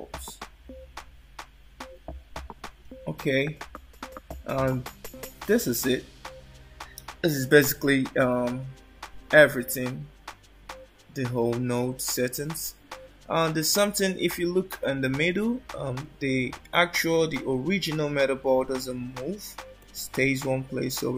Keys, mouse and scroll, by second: 17.5 alt+middle click, 20.0 click.